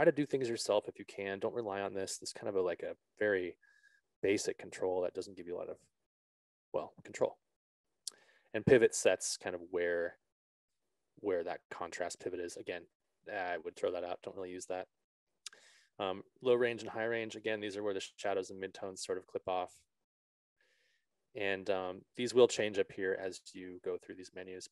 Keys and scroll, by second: 6.7 ctrl+z.